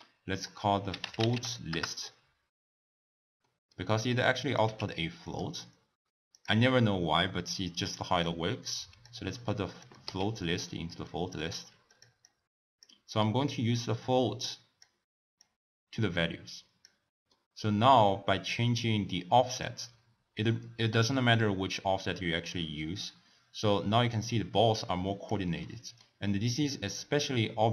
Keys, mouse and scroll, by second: 3.5-4.2 middle drag, 4.2-4.7 drag, 4.7 w, 8.2 click, 9.9 click, 10.2 x, 10.7-11.9 middle drag, 11.9 click, 12.3-13.6 drag, 15.4 click, 17.4-19.7 middle drag, 19.7-22.7 drag, 25.7-26.7 middle drag, 26.7-27.7 drag.